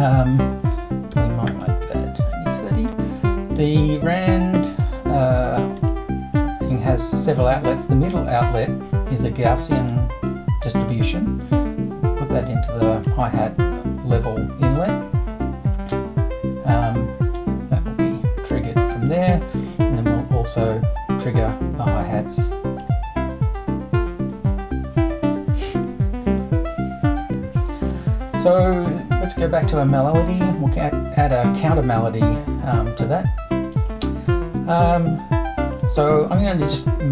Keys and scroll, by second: 0.9-2.5 typing.